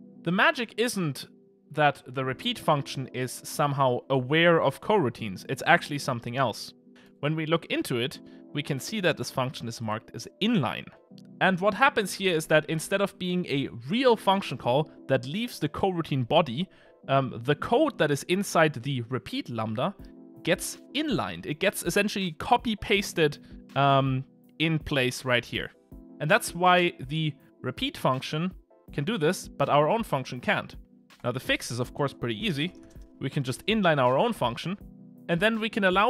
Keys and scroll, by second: 7.2 super+b.